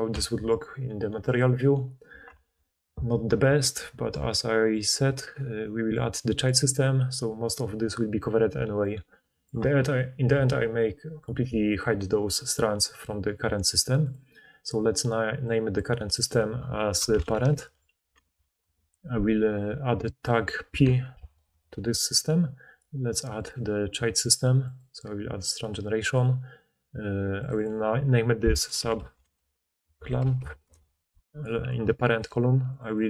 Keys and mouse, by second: 1.3 middle click, 2.4 alt+a, 3.4-6.5 middle drag, 6.5-8.9 drag, 16.1 click, 20.0 click, 27.5 click, 29.2-32.1 shift+middle drag, 32.1 click, 32.7-33.0 middle drag.